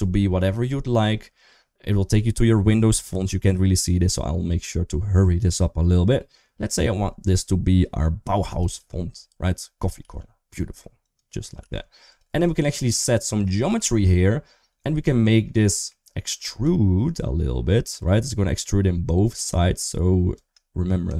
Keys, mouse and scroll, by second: 9.8 s, 11.3 g, 13.3 click, 14.7 middle click, 15.5 middle click, 16.6-20.2 shift+drag, 21.0 shift+click.